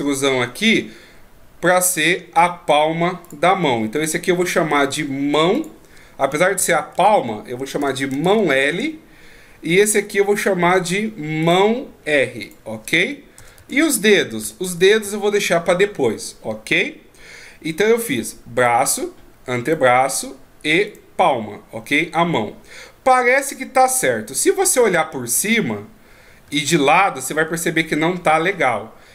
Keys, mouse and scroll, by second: 3.9 right click, 4.4-5.6 scroll down 2, 5.6 click, 5.6-7.0 scroll down 1, 11.4 right click, 12.4 click, 17.2-17.7 scroll up 1, 17.7-18.6 scroll up 1, 18.6 right click, 19.6 right click, 20.9 right click, 24.9 KP_7, 26.4 KP_3.